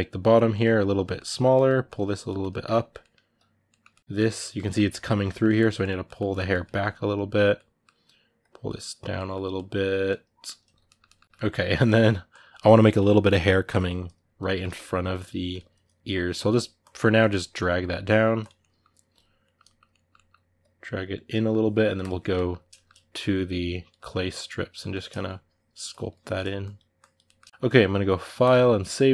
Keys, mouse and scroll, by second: 0.3-1.6 middle drag, 1.6 click, 2.0 middle click, 2.4 click, 2.8-5.6 middle drag, 5.6 click, 5.8 middle click, 6.1 click, 6.3-8.2 middle drag, 8.2 click, 8.9-11.6 middle drag, 11.6-14.2 drag, 14.2 ctrl+middle click, 14.9-18.4 drag, 18.4-20.4 middle drag, 20.4 click, 21.1 middle click, 21.8 click, 22.1 ctrl+middle click, 22.9 click, 23.7 middle click, 24.1 click, 24.6 middle click, 24.8-27.0 drag, 27.0 ctrl+middle click, 27.3 shift+click, 27.5-29.1 middle drag.